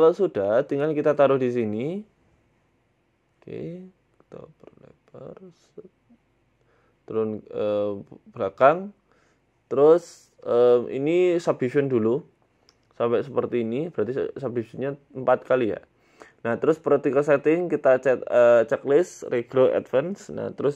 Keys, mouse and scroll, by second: 0.1 s, 0.9 g, 1.4 s, 2.7 g, 3.5 s, 4.7 g, 5.2 s, 6.6 middle click, 7.3 g, 9.1 click, 9.8 click, 10.8 Tab, 11.4 w, 11.7 w, 12.0 w, 12.3 w, 13.6 Tab, 13.9 Tab, 14.8 click, 15.6 click, 17.6 click, 18.0 click, 18.6 click, 19.1 click, 19.3 click, 19.9 click.